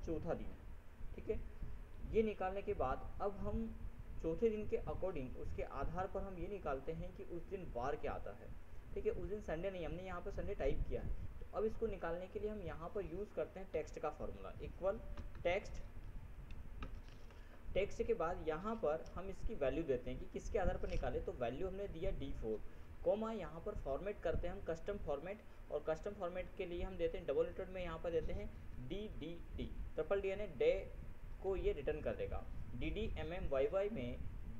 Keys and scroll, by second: 15.4 ctrl+t, 15.6 ctrl+e, 16.7 ctrl+x, 17.1 ctrl+Tab.